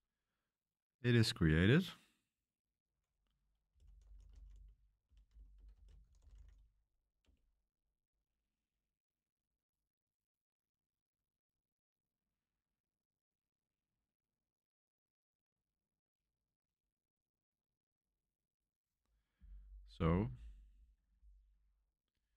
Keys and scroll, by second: 3.4-7.0 typing, 7.2 Return.